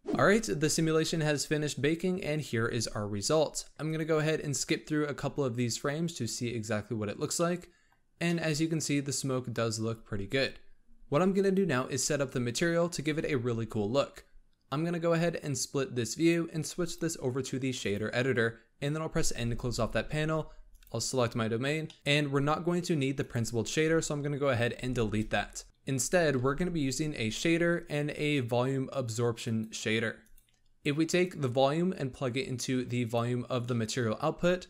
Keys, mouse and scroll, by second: 0.3 n, 5.0-7.7 drag, 7.7-9.8 middle drag, 9.8-10.5 scroll up 2, 11.4-13.5 drag, 13.5 scroll down 2, 15.3-19.2 drag, 19.2 n, 20.6 click, 21.8 middle click, 22.0 scroll up 5, 23.1 click, 23.6 scroll up 2, 24.7 x, 26.3 shift+a, 31.1 click, 33.6 middle click, 34.2 scroll up 2.